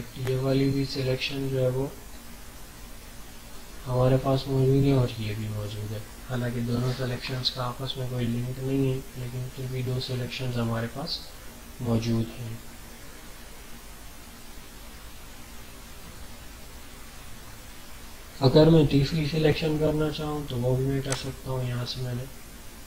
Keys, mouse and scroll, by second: 0.5-1.5 ctrl+scroll up 4, 2.1 alt+scroll up 1, 21.1-22.8 drag.